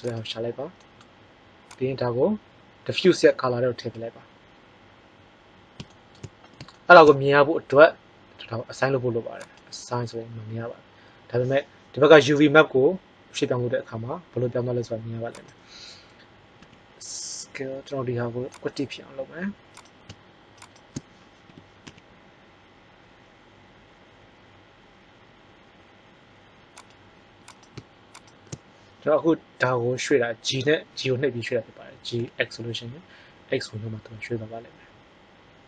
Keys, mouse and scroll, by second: 12.7 g, 16.6 s, 21.4 g, 30.4 g.